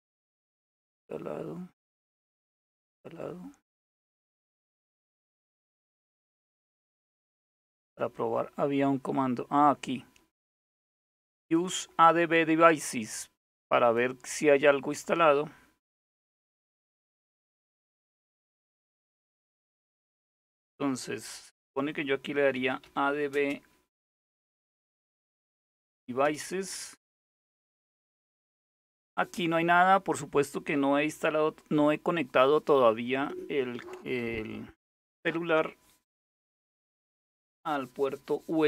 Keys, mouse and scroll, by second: 1.6-2.4 scroll down 2, 2.4-3.2 scroll down 1, 3.4-4.3 scroll down 2, 4.6-5.4 scroll up 2, 5.6-6.5 scroll up 2, 7.1-7.9 scroll up 2, 8.3-8.9 scroll up 2, 8.9-9.8 scroll down 2, 11.0 click, 12.3-13.7 drag, 14.5 click, 15.3 click, 21.7-25.9 typing.